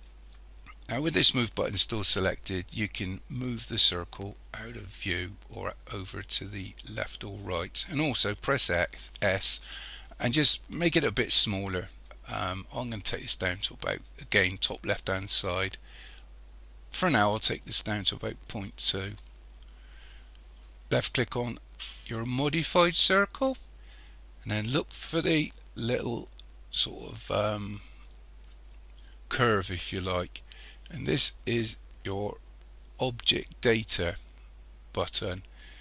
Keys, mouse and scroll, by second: 3.9 click, 8.5 s, 20.9 click.